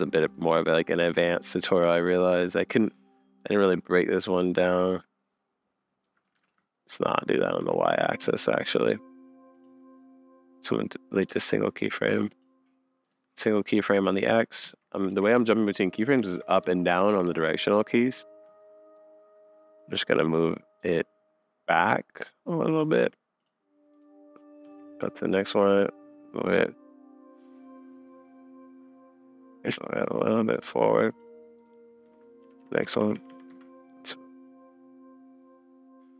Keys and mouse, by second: 1.8 Up, 4.9-6.1 shift+drag, 6.4 super+z, 7.6 shift+Left, 8.2 Up, 14.6 Up, 15.1 Down, 15.3 Up, 16.2 Down, 16.6 Up, 17.0 Down, 17.2 Up, 18.9-22.8 shift+middle drag, 23.4 click, 24.6 Up, 25.8-27.0 shift+middle drag, 32.4 Up, 32.6 Up, 32.7 Up, 32.8 Down, 33.0 Down, 33.1 Down, 33.3 Down, 33.5 space.